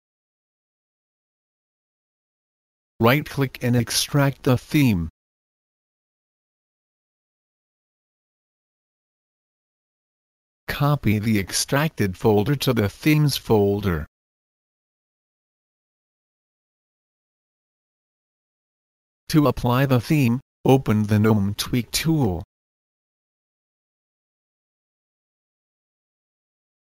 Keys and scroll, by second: 24.7 Return, 24.7 typing.